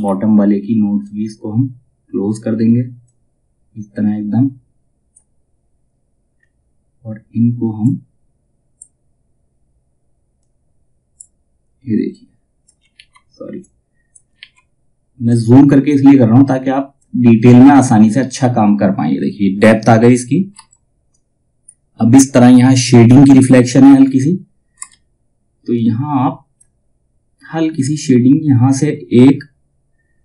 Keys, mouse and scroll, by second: 0.5-5.8 drag, 5.8 scroll down 1, 7.3-12.4 drag, 12.7 ctrl+z, 13.1 click, 13.9 ctrl+z, 14.8-17.0 drag, 17.0-17.5 scroll down 1, 20.1 F2, 20.6-23.5 drag, 23.5 space, 25.2-30.2 drag.